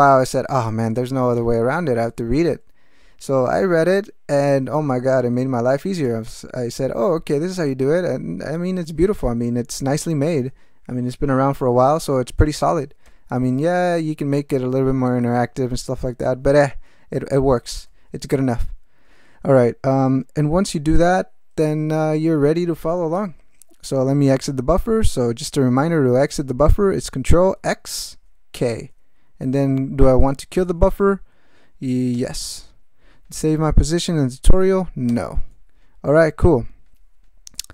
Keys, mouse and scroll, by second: 27.6 ctrl+x, 28.5 k, 32.1 Return, 35.1 n, 37.6 alt+m.